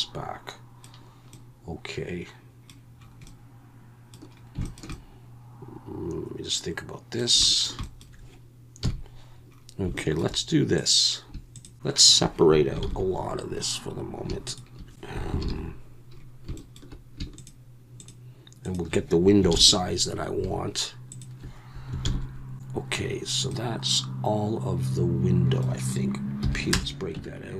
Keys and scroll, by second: 8.8 KP_1, 11.7 shift+3, 12.8 ctrl+l, 15.4 ctrl+l, 19.5 ctrl+l, 22.0 ctrl+l, 26.4 p, 27.1 Tab.